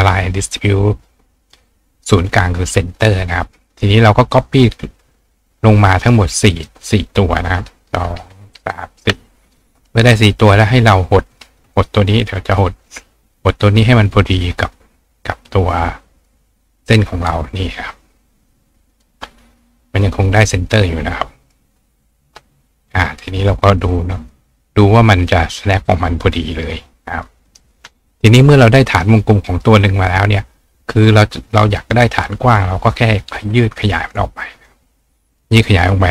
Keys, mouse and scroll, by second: 0.6 click, 1.4 click, 2.5 click, 3.0 click, 3.5 click, 5.6-6.7 drag, 5.9 right click, 9.6 click, 11.3-14.4 shift+drag, 15.6 click, 18.9 click, 19.9 click, 20.7 click, 23.4 click, 24.2 click, 27.2 click, 27.5 right click, 28.2 right click, 29.3 click, 31.5 click, 32.2 click, 33.4 click, 34.0 right click, 34.6 click, 35.3 click.